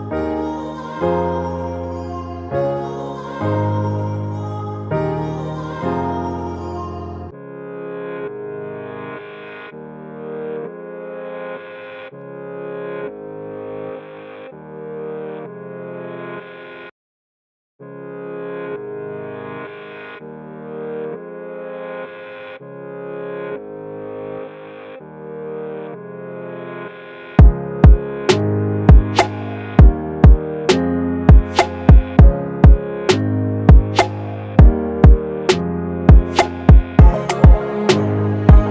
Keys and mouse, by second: 0.5-9.4 drag, 10.8-13.3 drag, 14.5-15.8 drag, 17.2-20.5 drag, 30.3-31.6 middle drag, 32.5-33.8 middle drag, 36.8-37.9 middle drag, 38.6-38.7 drag.